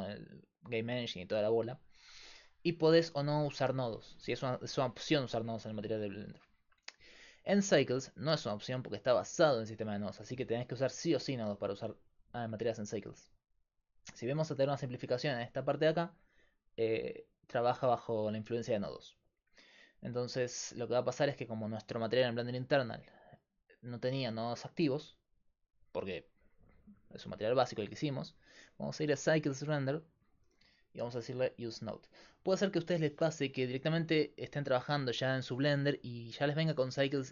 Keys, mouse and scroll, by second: 6.2-9.4 middle drag, 7.7-9.4 drag, 7.7-9.4 right drag, 22.3-23.9 drag, 28.1-31.6 drag, 31.6-32.7 right drag, 32.7-37.3 drag.